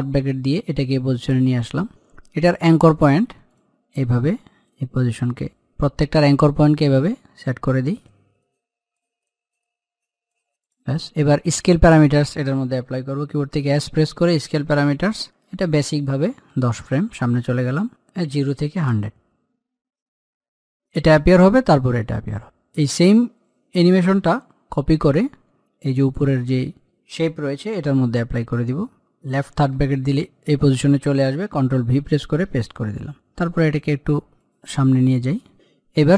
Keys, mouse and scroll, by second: 3.2 click, 3.4-10.6 drag, 13.3 s, 14.6 click, 16.3 Page_Down, 18.0 click, 22.4-24.9 drag, 24.9 ctrl+c, 25.8 click, 29.4 i, 31.7 ctrl+v, 32.5-36.1 drag.